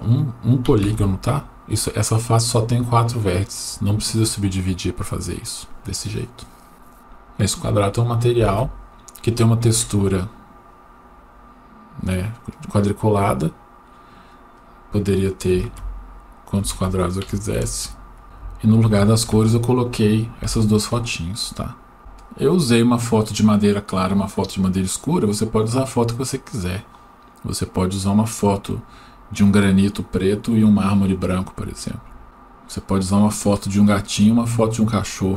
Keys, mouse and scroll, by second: 10.0-11.3 scroll down 1, 11.3-13.0 scroll up 1, 13.0-15.3 drag, 17.6 ctrl+z, 21.6-23.6 scroll down 1.